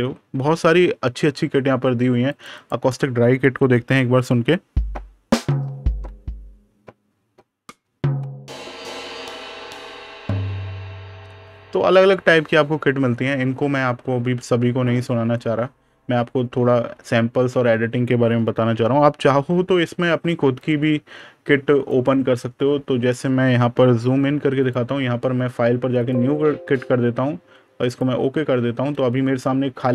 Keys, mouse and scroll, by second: 0.8-2.1 scroll down 1, 2.1 click, 12.0-12.5 scroll down 1, 20.4 click, 23.8 super+KP_Add, 24.5 click, 28.4 super+KP_Subtract.